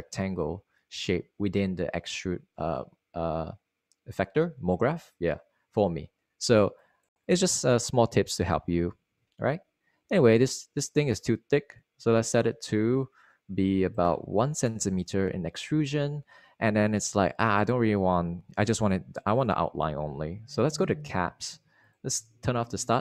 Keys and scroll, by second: 15.7 1, 15.8 Return.